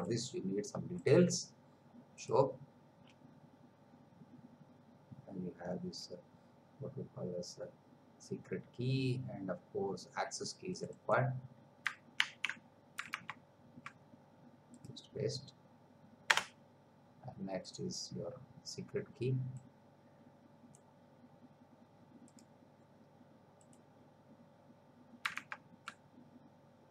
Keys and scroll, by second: 12.2 ctrl+c, 13.3 alt+Tab, 16.3 Return, 25.5 alt+Tab.